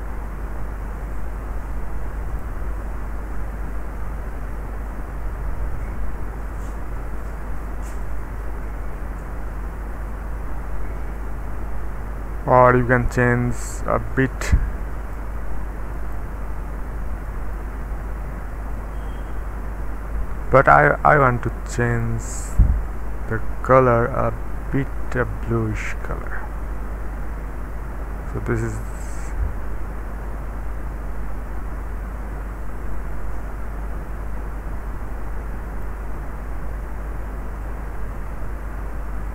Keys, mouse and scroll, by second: 2.9-5.6 scroll down 1, 6.7 click, 8.0 click, 13.7 click, 15.9 click, 16.6 scroll down 1, 17.2-17.8 scroll down 1, 17.8-20.5 scroll up 2, 21.9 click, 22.5 click, 23.0 click, 24.1-35.9 drag, 37.6-39.3 drag.